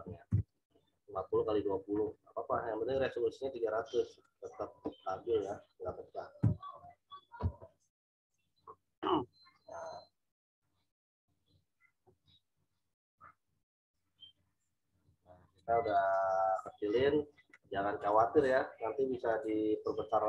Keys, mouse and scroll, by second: 0.0-0.2 typing, 3.9 click, 6.4 Return, 15.4 click.